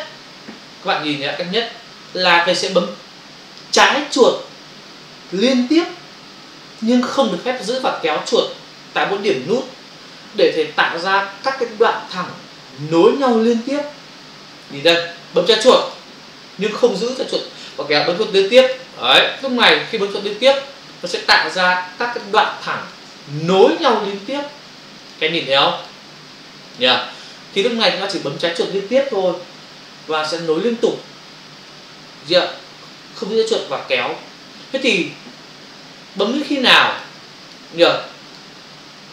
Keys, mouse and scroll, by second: 1.3 ctrl+space, 1.5 ctrl+click, 1.6 ctrl+space, 15.8 click, 15.9 click, 18.7 click, 19.3 click, 19.4 click, 20.2 click, 21.6 ctrl+click, 22.5 click, 23.4 click, 23.6 click, 24.3 click, 24.4 double click, 25.0 click, 25.1 click, 25.7 click, 25.9 double click, 26.6 click, 26.7 click, 36.2 click, 36.4 click, 37.4 click, 37.5 double click, 38.3 click, 38.4 click.